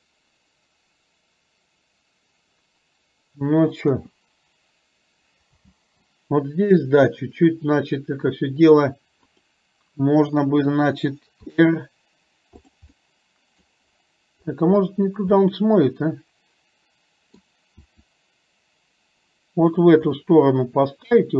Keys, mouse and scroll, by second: 3.9 KP_0, 5.7 space, 9.3 click, 11.6 r, 13.0-13.7 middle drag, 15.5-17.5 middle drag, 18.0 r, 20.3-21.3 middle drag.